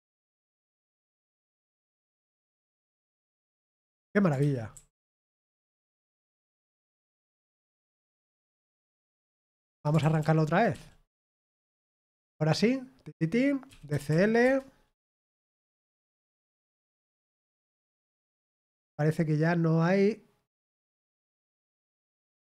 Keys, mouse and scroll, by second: 3.8 Escape, 4.3-6.1 typing, 9.9 ctrl+p, 9.9 typing, 10.1 ctrl+p, 10.7 ctrl+p, 11.1 ctrl+p, 12.1 Return.